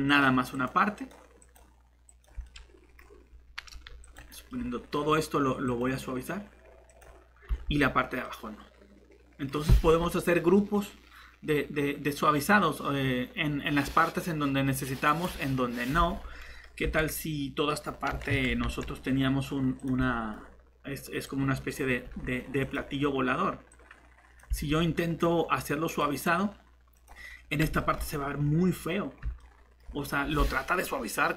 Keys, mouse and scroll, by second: 3.7 alt+shift+c, 7.5 Tab, 16.8 Tab, 18.1 e, 18.3 Escape, 18.6 s, 22.0 s, 24.5 Tab.